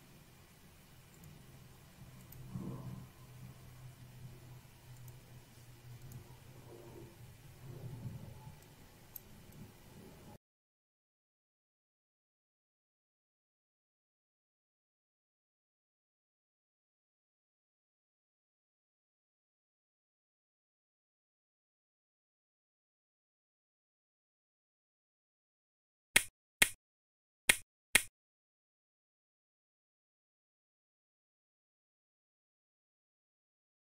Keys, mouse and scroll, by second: 0.2 click, 1.7 click, 2.7 click, 5.4 click, 6.4 click, 6.9 scroll down 1, 8.9 click, 9.7 click, 11.9 click, 13.0 scroll down 1, 14.7 scroll up 1, 17.8-18.1 scroll up 1, 19.6 scroll down 1, 21.0 scroll down 1, 22.4-23.9 drag.